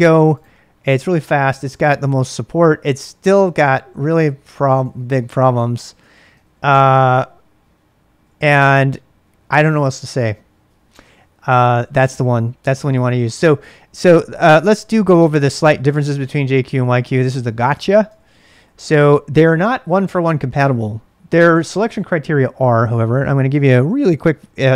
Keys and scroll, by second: 4.8-6.6 typing, 12.5-13.3 typing, 14.4 ctrl+a, 14.6 ctrl+a, 15.6 ctrl+[, 15.6 ctrl+j, 15.8 k, 16.0 k, 16.7 ctrl+[, 16.7 ctrl+j, 17.6-18.6 typing.